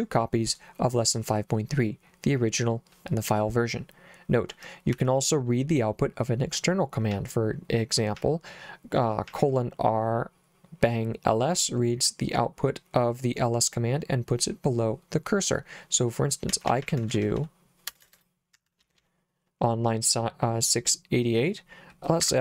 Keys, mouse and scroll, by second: 5.0 Escape, 7.2 j, 8.2 j, 9.3 j, 16.3-19.0 typing, 18.6 Escape, 22.3 Escape.